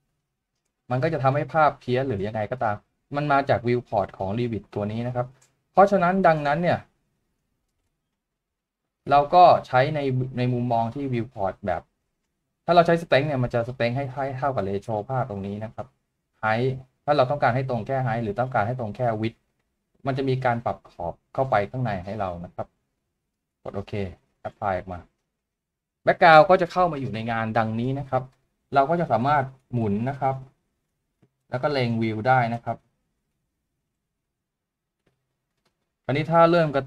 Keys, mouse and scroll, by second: 29.4 middle click, 31.5 shift+middle click, 34.1 shift+middle click.